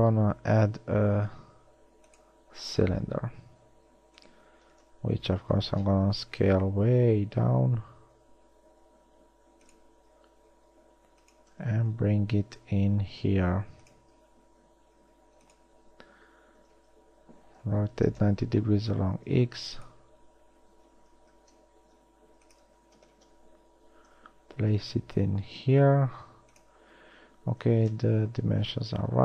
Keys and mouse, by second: 3.7 s, 5.1 KP_1, 6.9 s, 10.3 g, 13.1 s, 15.1 s, 16.8 r, 19.5 s, 21.5 ctrl+z, 22.2 s, 23.0 z, 24.5 g, 28.2 KP_3, 28.9 z.